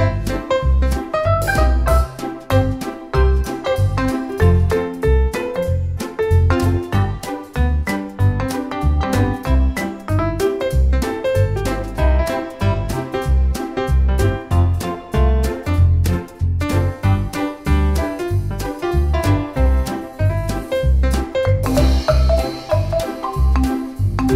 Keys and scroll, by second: 0.7 space, 3.1 Escape, 3.5 space, 6.0 space, 9.4 space, 11.1 space, 12.5 space, 14.6 space, 17.8 space, 21.3 space, 22.9 space.